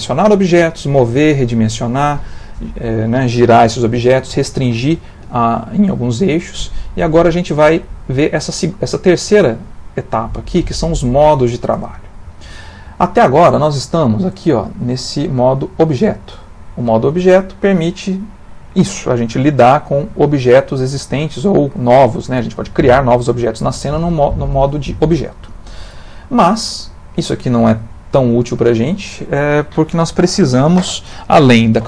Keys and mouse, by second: 17.1 click, 18.1 click, 19.0 click, 19.7 click, 21.0 g, 22.2 shift+a, 25.9 click, 27.0 click.